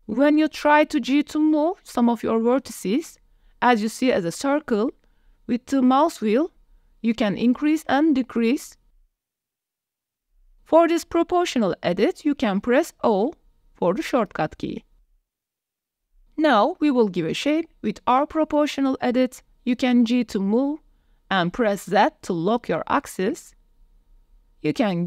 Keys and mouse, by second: 8.9 click, 9.7 click, 10.0 o, 10.3 click, 11.6 o, 12.2 o, 12.5 o, 13.0 click, 14.2 click, 15.0 click, 15.7 KP_1, 16.4 g, 21.2 z.